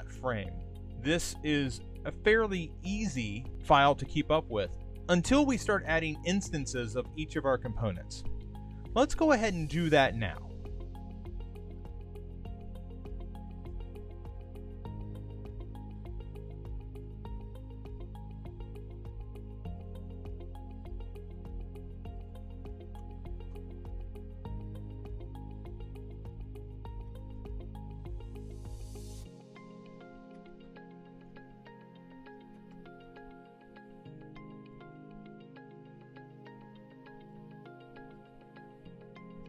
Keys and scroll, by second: 12.5 super+c, 21.7 super+v, 24.2 super+z, 27.4 shift+r, 31.2 shift+2, 32.8 shift+0, 37.0 super+g, 37.8 super+g, 39.3-39.4 typing.